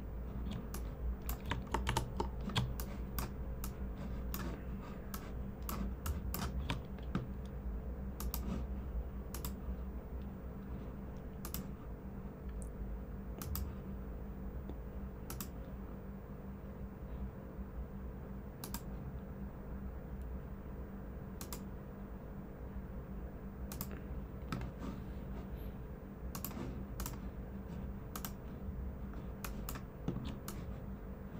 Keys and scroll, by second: 1.8 super+-, 2.5-3.1 typing.